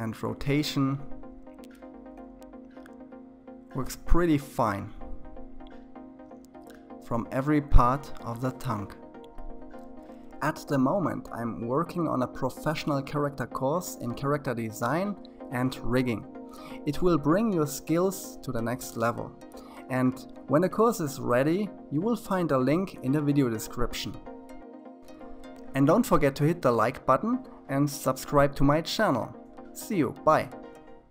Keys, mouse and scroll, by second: 1.5 click, 2.3 r, 4.7 s, 6.7 click, 7.3 r, 10.1 s, 12.0 s, 14.5-15.0 scroll down 3, 15.0-19.4 middle drag, 19.4 click, 20.4-20.9 scroll down 4, 20.9-24.4 middle drag, 25.3-31.1 middle drag.